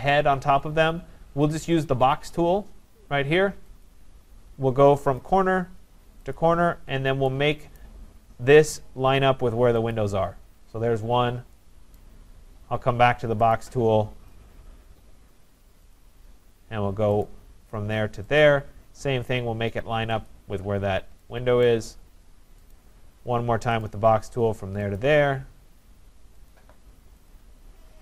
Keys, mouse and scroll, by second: 3.9 click, 5.2 click, 6.4 click, 7.8 right click, 9.9 click, 11.2 scroll, 12.0 right click, 13.6 click, 13.9 scroll, 16.0 click, 17.3 click, 18.4 click, 19.0 scroll up 2, 20.3 click, 20.8 scroll down 4, 21.7 right click, 22.0 scroll down 1, 22.0-22.7 scroll, 22.7 right click, 23.8 click, 25.0 click, 26.5 click, 27.3 click, 27.8 scroll.